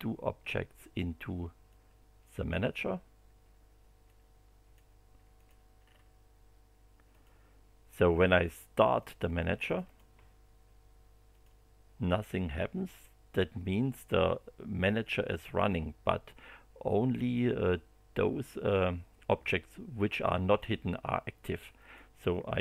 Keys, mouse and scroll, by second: 1.7 click, 4.0 click, 5.3 click, 5.8-6.1 scroll down 1, 7.1 click, 9.0 click, 9.6 click, 11.3 click, 15.2 click, 21.8 click.